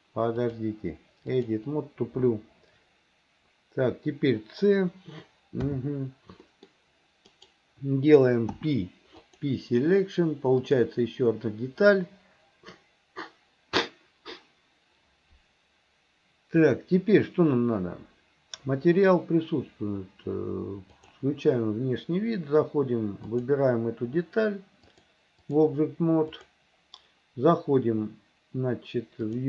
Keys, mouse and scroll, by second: 0.4-1.6 drag, 5.7 c, 8.5 p, 10.7-17.1 drag, 21.2-22.4 drag, 23.3 click, 25.0 click, 26.4 click.